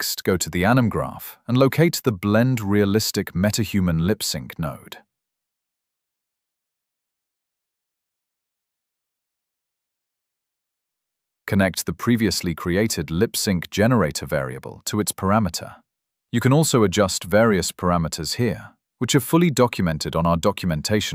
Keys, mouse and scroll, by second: 2.7 right click, 3.6 scroll, 3.9 click, 5.6 click, 6.8-8.6 typing, 9.8 click, 11.6 scroll, 12.5 click, 13.2 scroll, 14.6 click, 16.5 click.